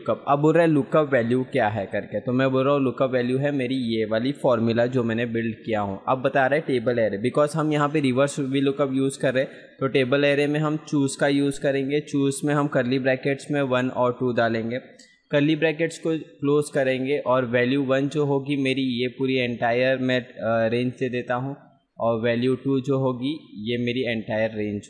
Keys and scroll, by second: 2.8 ctrl+v, 19.3 ctrl+space.